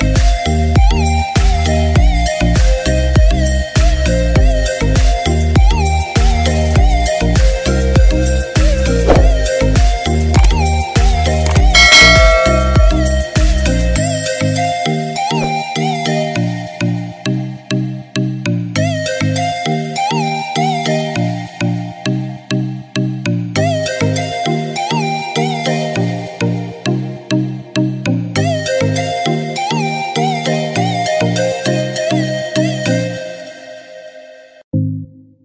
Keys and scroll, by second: 1.6-2.8 typing, 4.3-5.2 typing, 7.9 typing, 10.4-11.1 typing.